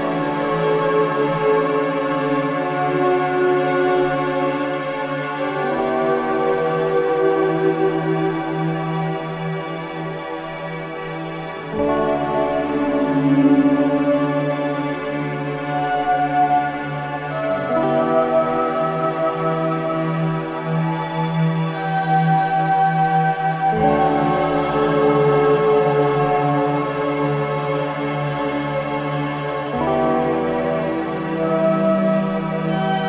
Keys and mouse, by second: 2.1 click, 2.2 click, 3.1 Tab, 4.4 Tab, 6.1-9.3 drag, 12.8-15.9 drag, 17.6-19.2 drag, 19.8 click, 23.2-26.4 drag, 28.5 Tab, 29.7 2, 31.2 click, 32.1 alt+shift+click.